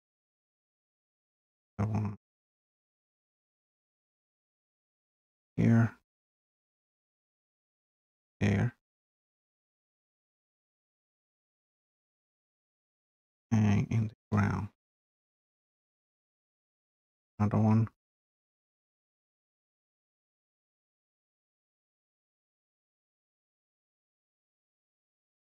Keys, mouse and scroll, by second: 0.8-1.2 scroll up 2, 1.7 scroll up 2, 2.9 scroll, 3.2 click, 3.9 scroll, 5.3 click, 6.3 click, 11.1 click, 11.9 scroll, 12.1-12.7 scroll down 2, 12.8-13.2 scroll up 2, 13.9 scroll down 1, 17.4 click, 18.7 scroll, 24.0 click.